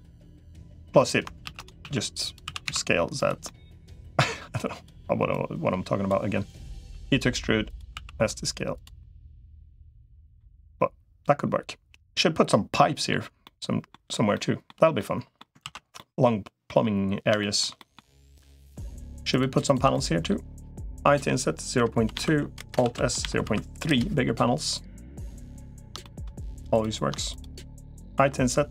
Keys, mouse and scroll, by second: 1.3 shift+d, 1.7 s, 2.3 s, 3.3 middle click, 3.9 click, 5.3 click, 6.3 click, 6.7 e, 7.7 s, 8.8 middle click, 9.9 middle click, 10.6-12.9 middle drag, 13.2 middle click, 14.1 middle click, 14.8 middle click, 15.5 ctrl+s, 15.7 middle click, 17.2 shift+middle click, 18.3 click, 19.1 shift+click, 19.7 middle click, 21.1 i, 22.7 alt+s, 25.3 middle click, 25.8 shift+middle click, 25.9 shift+click, 26.5 click, 27.1 shift+click, 28.1 i.